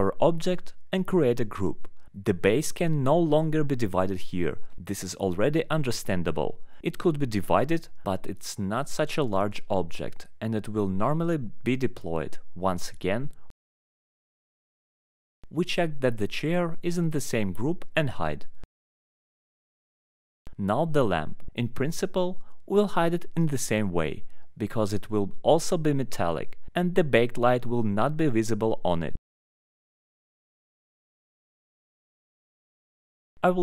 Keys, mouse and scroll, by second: 0.0 alt+middle click, 0.1 click, 0.8 alt+middle click, 1.7 click, 3.0 alt+middle click, 3.2 middle click, 5.2 click, 6.7 right click, 6.9 click, 7.5 click, 8.3 alt+middle click, 9.1 click, 10.2 alt+middle click, 11.1 ctrl+click, 11.7 ctrl+click, 12.7 ctrl+right click, 12.8 click, 13.1 alt+middle click, 14.0 click, 14.5 click, 17.8 alt+middle click, 19.0 alt+middle click, 19.6 click, 20.2 alt+middle click, 21.7 right click, 21.9 click, 23.3 middle click, 23.3 middle click, 23.4 alt+middle click, 23.7 alt+middle click, 24.7 click, 25.3 alt+middle click, 25.8 click, 25.8-26.2 scroll, 26.9 alt+middle click, 27.2 scroll, 28.0 alt+middle click, 29.1 scroll, 30.0 alt+middle click, 30.8 click, 31.7 middle click, 31.8 scroll, 32.9 click, 33.5 click.